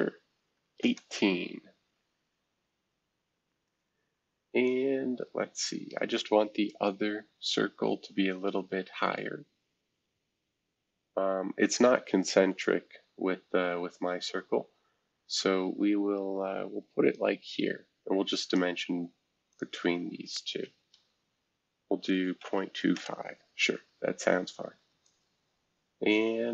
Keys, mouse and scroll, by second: 0.5 typing, 0.8 Return, 2.1 scroll down 1, 2.6 scroll up 1, 4.6-17.1 drag, 17.6-20.6 drag, 17.6 typing, 20.6 typing, 22.1-23.2 typing, 25.0-26.5 drag.